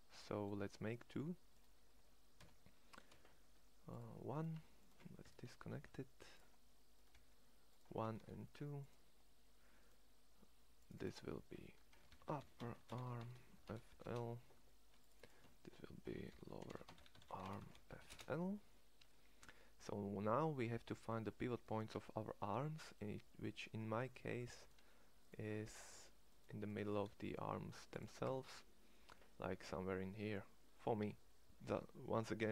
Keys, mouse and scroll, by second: 2.2 e, 5.4 alt+p, 6.9 g, 8.0 shift+d, 12.1 p, 19.3 Tab, 21.9 Tab, 26.9 shift+s, 28.2 Tab.